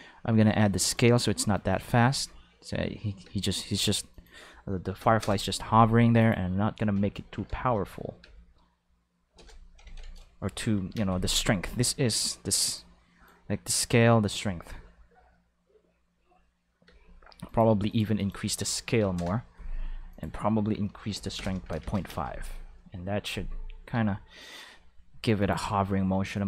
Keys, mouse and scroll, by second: 1.7 click, 1.9 space, 3.2 space, 4.1 click, 4.9 1, 5.2 Return, 6.2 click, 7.5 0, 8.2 Left, 9.3 1, 9.4 Return, 9.8 ctrl+s, 11.0 space, 11.6 space, 12.8 click, 14.4 space, 16.9 space, 17.5 click, 17.9 click, 18.2 click, 18.7 2, 19.0 0, 19.2 Return, 20.1 click, 21.1-22.2 typing, 21.4 Return, 23.9 space, 24.1 5, 25.4 click, 26.3 click.